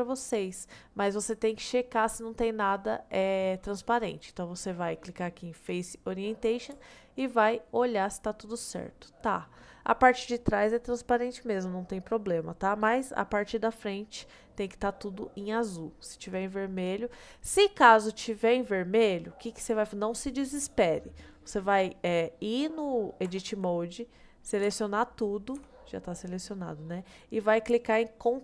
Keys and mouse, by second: 1.6-6.1 drag, 7.8-10.1 middle drag, 11.7-12.7 middle drag, 13.4-13.8 middle drag, 14.1-15.4 middle drag, 16.3 click, 17.6-19.3 middle drag, 23.3 Tab, 24.7 a, 25.6 a, 25.9-27.6 middle drag.